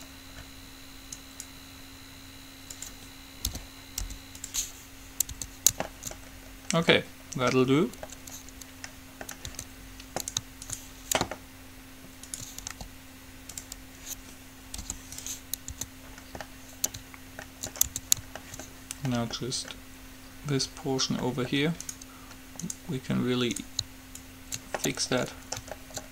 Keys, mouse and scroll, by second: 0.6 middle click, 1.5-3.1 right drag, 3.7 p, 4.2 u, 5.5 Tab, 9.6 Tab, 10.4-14.3 right drag, 13.0 g, 14.0 click, 15.0 u, 16.0 Tab, 18.0 Tab, 22.0-23.1 right drag, 24.5-26.1 drag, 24.5-26.0 middle drag, 24.5-25.5 right drag.